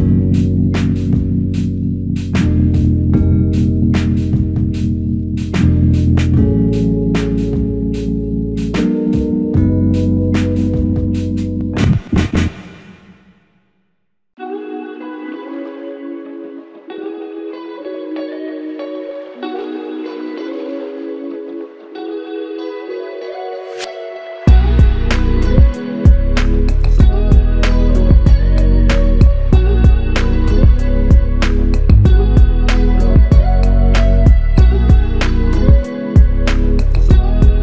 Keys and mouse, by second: 0.6 double click, 6.0 double click, 9.8 alt+click, 10.9 typing, 11.7 double click, 15.6 alt+click, 18.0 f, 18.9 double click, 25.5 shift+click, 30.3 alt+shift+click, 31.4 alt+click, 31.7 shift+c, 33.5 alt+click, 34.4 double click.